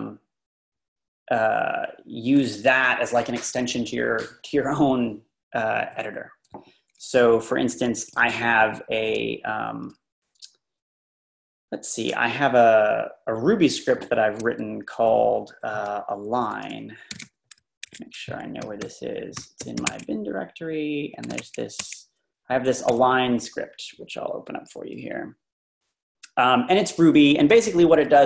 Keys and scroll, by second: 7.8 Down, 7.9-8.5 typing, 9.7 Down, 16.8-20.1 typing, 21.1-21.9 typing, 22.9 Return, 24.7 Page_Down, 24.8 Page_Down, 25.0 Page_Down, 26.6-27.1 Down, 27.3 Down, 27.5 Down, 27.6 typing, 27.6 Down, 27.8 Down, 28.0 Down.